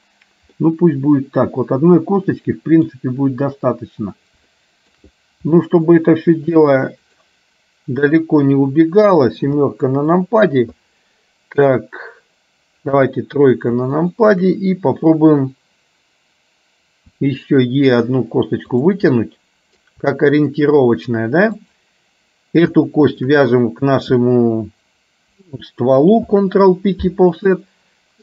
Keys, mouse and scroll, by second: 0.7-3.0 middle drag, 3.0-3.7 scroll down 1, 3.7-4.4 scroll down 1, 4.7 shift+middle click, 5.7 middle click, 7.2 click, 9.5 KP_7, 13.0 KP_3, 14.0 middle click, 17.2 e, 19.3 middle click, 20.3 shift+middle click, 21.7 click, 23.2 shift+click, 26.3 ctrl+p.